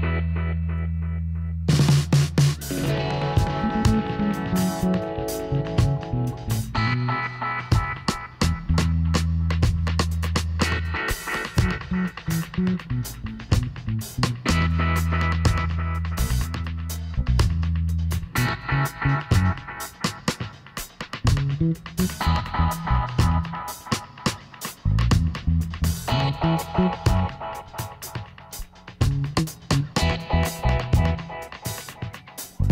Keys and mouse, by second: 4.0-5.8 middle drag, 6.0-7.8 drag, 7.0 right click, 7.5 middle click, 7.8-9.9 right drag, 9.5 g, 18.6-20.5 drag, 20.7 g, 23.5-25.2 drag, 24.4 g, 29.0-30.8 right drag, 30.0 g.